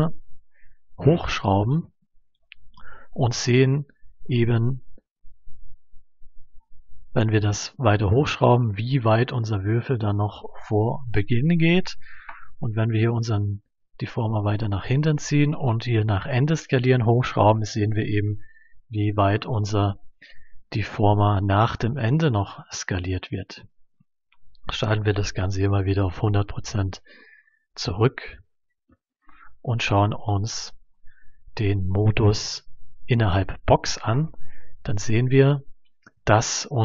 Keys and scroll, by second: 25.4 1, 25.6 0, 26.1 Return, 28.2 1, 28.4 0, 28.8 Return.